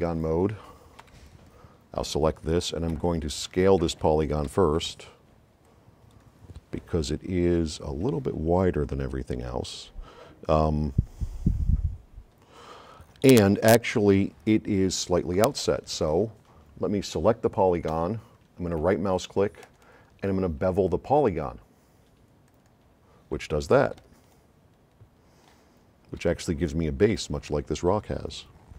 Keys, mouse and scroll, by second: 1.0 F9, 3.0 c, 4.6 c, 5.0 x, 5.7 click, 19.6 right click, 22.5-22.8 drag, 24.0 right click, 24.0 s, 25.6 right click, 25.8 middle click.